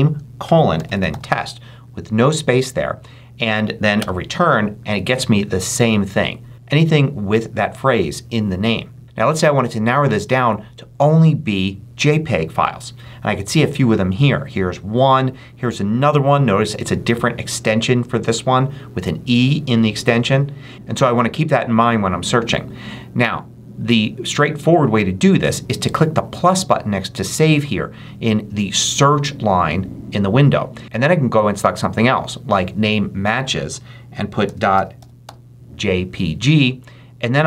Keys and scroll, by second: 0.0-1.4 typing, 3.9 Return, 34.1-35.6 typing.